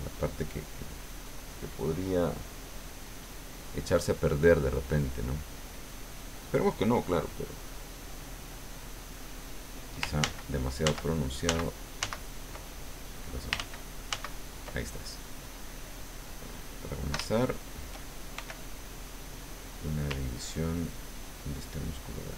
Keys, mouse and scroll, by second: 4.6-5.7 drag, 10.2 ctrl+z, 12.7 ctrl+click, 13.5 ctrl+z, 14.8 ctrl+click, 16.0 click, 17.3 shift+click, 18.4 shift+f, 18.9 click, 20.5-22.3 ctrl+drag.